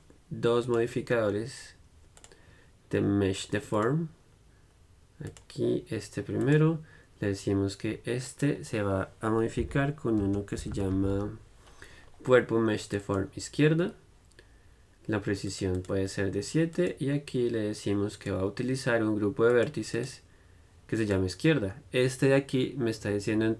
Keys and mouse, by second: 0.0-10.4 drag, 15.7-23.5 drag.